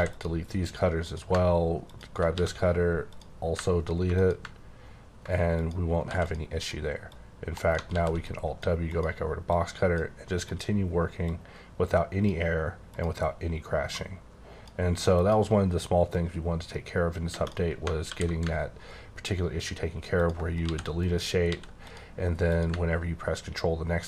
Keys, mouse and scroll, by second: 0.1 click, 1.0 click, 2.3 x, 3.1 click, 6.0 x, 6.2 click, 6.6 click, 7.1 click, 7.5 right click, 7.8 alt+w, 8.2 click, 8.9 click, 9.5 click, 10.5 click, 11.3 click, 12.9 click, 14.0 click, 15.2 click, 16.4 click, 17.3 space, 18.0 alt+w, 20.2 ctrl+click, 20.6 x, 21.0 click, 21.5 x, 21.8 click, 22.5 click.